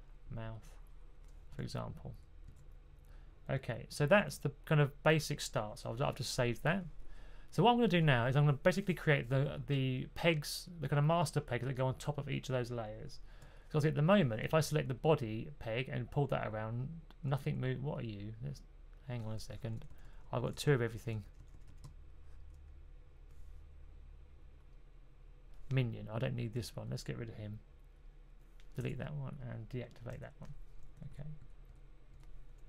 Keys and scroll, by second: 2.0 super+z, 2.3 super+z, 4.0 super+s, 19.5-22.9 typing, 30.0 d, 31.2 super+`, 31.3-32.0 typing.